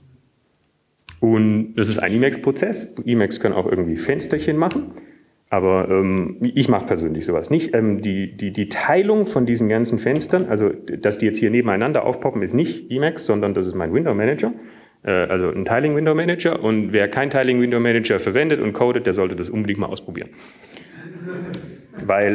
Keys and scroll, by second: 0.0-1.9 typing, 6.5 ctrl+x, 7.9 2, 12.3 alt+`.